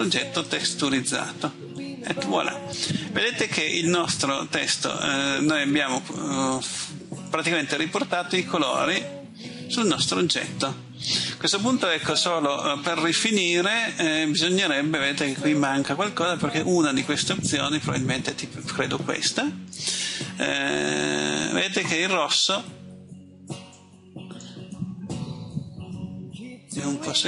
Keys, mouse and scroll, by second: 1.7 middle click, 22.5-22.9 scroll up 1, 23.7 middle click, 25.9-26.7 scroll up 1, 26.7 middle click.